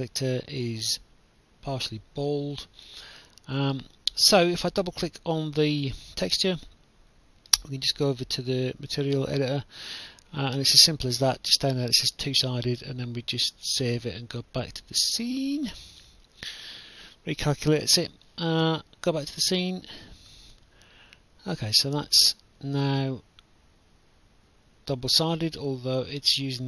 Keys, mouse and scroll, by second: 0.9 click, 1.9 right click, 1.9 w, 7.1 click, 8.4 click, 11.1 click, 12.9 click, 14.0 click, 15.8 click, 19.6 click, 20.0 right click, 20.9 w, 22.0 right click, 22.9 w, 24.7 right click.